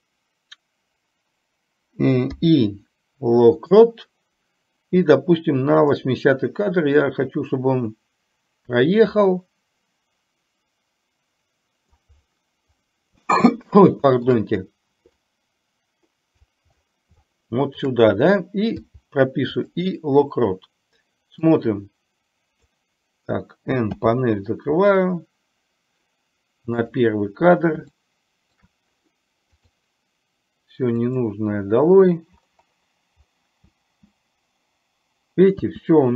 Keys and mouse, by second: 5.9 click, 7.1-12.2 drag, 13.6-14.3 shift+middle drag, 15.3-16.6 drag, 17.3-17.8 shift+middle drag, 21.6-22.9 drag, 26.9 click, 28.1-28.7 shift+middle drag, 29.7 click, 31.2 click.